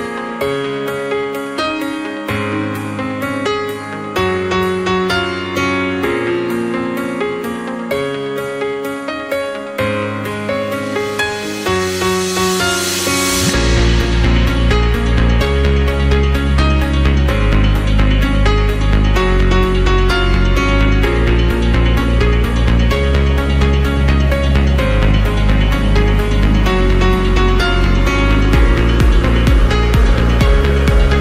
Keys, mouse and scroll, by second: 1.3 scroll up 2, 1.5-3.7 middle drag, 3.7 KP_1, 4.5-5.1 scroll down 2, 5.1-5.8 scroll up 1, 5.8 s, 9.2 scroll down 1, 9.4-10.5 middle drag, 10.5-10.8 scroll up 2, 10.8-11.7 middle drag, 11.7 scroll up 2, 11.9-12.7 middle drag, 12.7 Tab, 13.1-14.5 middle drag, 14.5 KP_1, 15.2-15.7 scroll up 2, 15.7 middle click, 16.3 scroll down 2, 16.6-18.1 middle drag, 18.1 click, 18.8 KP_1, 19.6-19.9 scroll up 1, 19.9 g, 21.8-23.1 middle drag, 23.1 click, 23.9 g, 25.8-27.5 middle drag, 27.5 Tab, 28.0-28.6 scroll down 3, 28.6 KP_1, 29.3-30.3 scroll up 1, 30.3-31.2 scroll down 2.